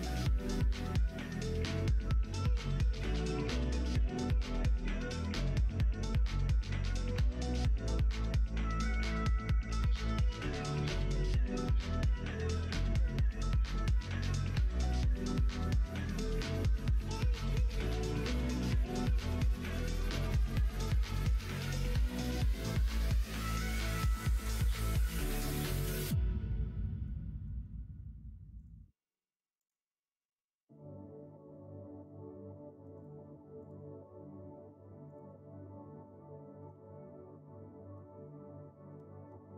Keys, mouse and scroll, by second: 0.2 click, 1.1 g, 2.8 e, 5.8 middle click, 6.1 middle click, 6.5 middle click, 6.8 shift+middle click, 7.5 middle click, 8.2 middle click, 10.8 click, 11.6 shift+click, 12.3 f, 13.2 click, 13.7 shift+click, 14.8 f, 15.3 middle click, 16.2 middle click, 16.5 shift+middle click, 17.3 middle click, 18.0 middle click, 18.6 middle click, 19.9 3, 20.2 click, 22.6 click, 26.8 middle click, 27.2 shift+middle click, 28.5 click, 29.5-33.0 drag, 33.5 click, 35.1-39.5 drag.